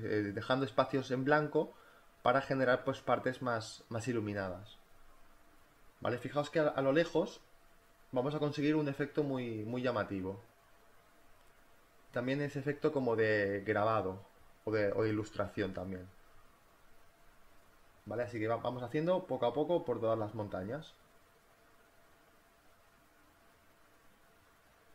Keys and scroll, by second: 0.3-1.7 typing, 3.4 space, 6.2-8.4 typing, 12.3 ctrl+z, 12.7 b, 13.8 ctrl+z, 14.2 ctrl+z, 16.6-17.5 typing, 18.6-20.0 typing, 21.7 space, 22.3 ctrl+z.